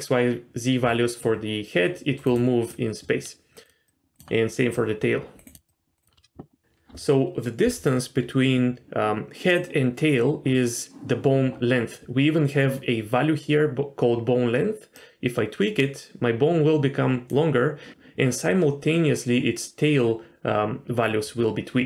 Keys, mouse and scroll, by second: 1.2-2.2 shift+drag, 2.7 shift+click, 3.9 shift+click, 4.7 shift+click, 5.7 shift+click, 14.9-17.3 drag.